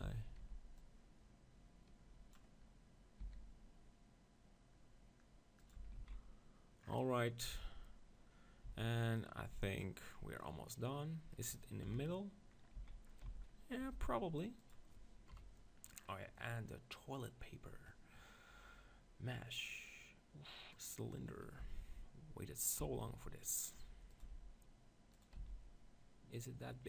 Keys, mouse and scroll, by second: 0.1 z, 0.1 b, 0.4 b, 3.2 s, 5.7-7.5 drag, 5.8 Tab, 6.0 z, 7.5-8.9 middle drag, 7.7 z, 8.7 z, 9.2-10.9 drag, 10.4-12.2 middle drag, 12.0 KP_7, 12.8 z, 13.2 z, 13.8 g, 15.5-16.5 drag, 15.5 KP_1, 16.5 middle click, 17.4-19.1 drag, 21.6 g, 22.7-24.6 drag, 22.9 s, 24.2 g, 25.2-26.8 drag, 25.5 s.